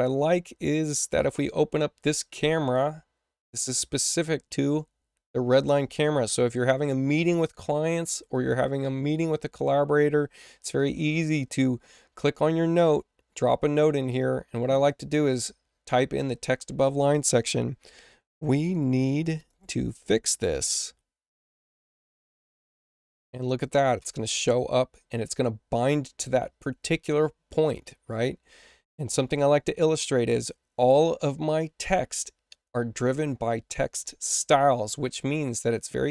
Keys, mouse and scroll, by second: 0.9 click, 1.1 click, 12.7 click, 14.8 click, 16.1 click, 18.0-21.1 typing, 22.1 Return.